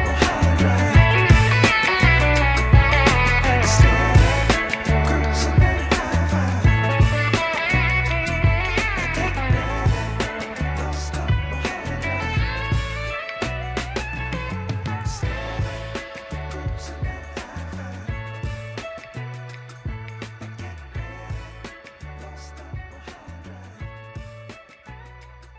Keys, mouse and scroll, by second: 0.4 click, 0.9-1.4 scroll down 2, 1.4-2.9 middle drag, 3.6 KP_1, 4.8 shift+d, 6.5 scroll up 2, 6.8 shift+middle click, 8.3 r, 11.7 g, 14.4 click, 14.9 shift+middle click, 15.4-15.8 scroll up 3, 16.1-16.4 shift+middle drag, 17.0 scroll down 2, 17.3 shift+middle drag, 18.0 scroll up 4, 18.5 shift+middle drag, 19.6 g, 22.1 scroll down 2, 22.4 shift+middle click, 23.2-23.6 shift+middle drag, 23.6 shift+scroll up 1, 25.1 scroll up 2, 25.3 shift+middle click.